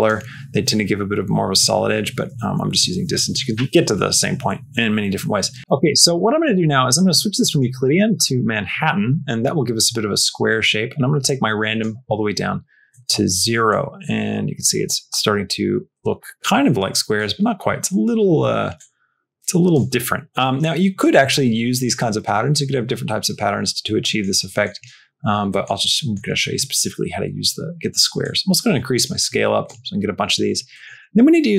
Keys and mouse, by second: 6.3 middle click, 7.5 click, 11.3 click, 12.9 middle click, 13.6-17.0 drag, 18.7 click, 24.0 middle click, 24.3 middle click, 25.5 middle click, 26.0 middle click, 28.1-29.5 drag, 30.7 middle click.